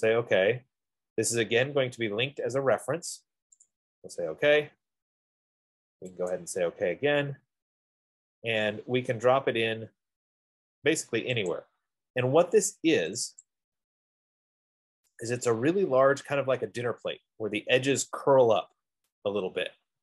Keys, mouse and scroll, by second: 4.0 click, 6.8 click, 7.4 click, 12.0 click, 13.5 click, 13.9 click, 14.4-15.1 scroll, 15.2 F15, 15.4-16.9 scroll, 16.9 middle click.